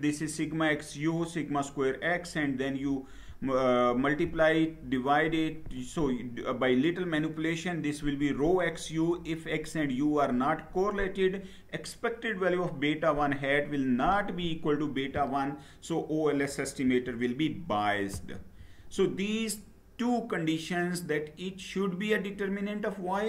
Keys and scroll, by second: 18.0 Down.